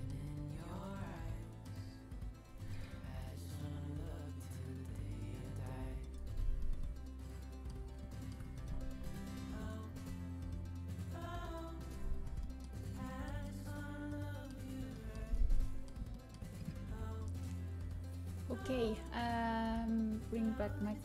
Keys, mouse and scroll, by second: 1.1-2.3 middle drag, 3.1-4.3 drag, 4.8-6.2 drag, 6.2 middle click, 11.1 g, 12.3-14.8 middle drag, 15.5-17.3 middle drag, 20.5-21.0 drag.